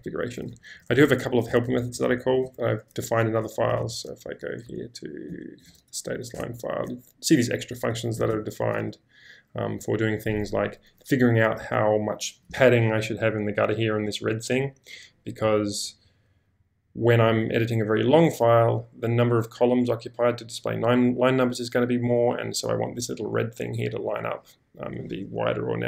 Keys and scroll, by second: 0.0-2.6 typing, 3.8-6.9 typing, 8.1 g, 10.3-11.2 typing.